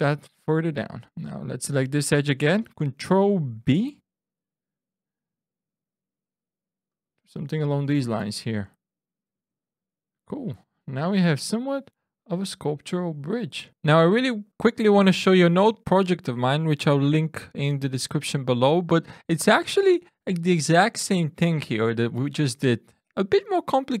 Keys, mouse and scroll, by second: 1.2 alt+click, 3.7 ctrl+b, 6.8 click, 9.3 Tab, 10.0-10.5 scroll down 4, 10.5-10.9 scroll up 3, 11.0-11.5 scroll down 2, 15.0 drag, 15.3 ctrl+r, 15.5 ctrl+Tab, 15.5 click, 15.9 ctrl+space, 15.9 e, 16.1 click, 16.6 click, 16.8 Tab, 17.1 Tab, 17.6 click, 18.6 ctrl+Tab, 18.6 click, 19.0 click, 19.4 ctrl+r, 19.7 click, 19.9 click, 20.1 e, 20.3 click, 20.8 click, 21.1-24.0 typing, 21.1 click, 22.1 click, 22.5 click, 22.9 click.